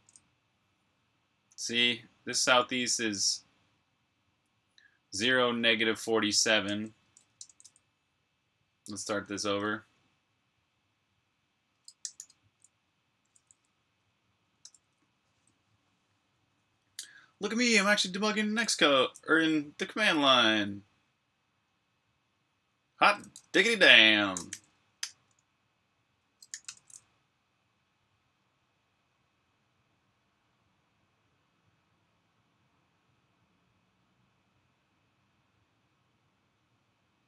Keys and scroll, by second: 7.0 q, 11.7-12.7 typing, 14.6-15.0 typing, 16.4 typing, 24.0-27.0 typing.